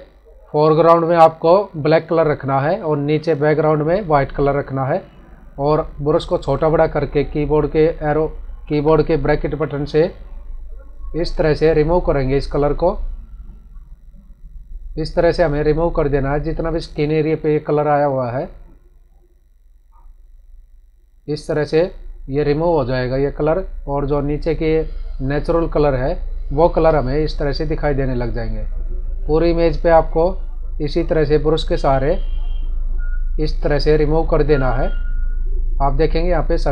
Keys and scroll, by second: 27.6 space.